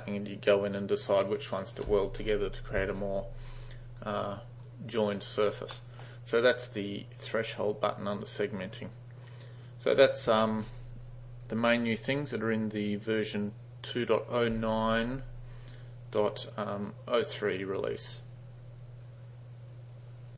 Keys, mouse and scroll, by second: 1.9 u, 3.6-4.1 drag, 4.7-5.1 drag, 5.8 middle drag, 16.5 click.